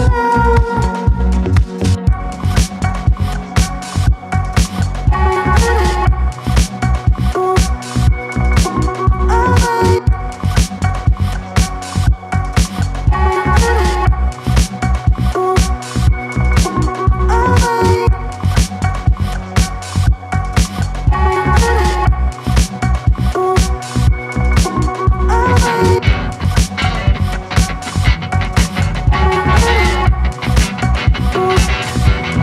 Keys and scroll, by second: 7.1 ctrl+z, 9.8 space, 28.5 space, 28.7 Escape.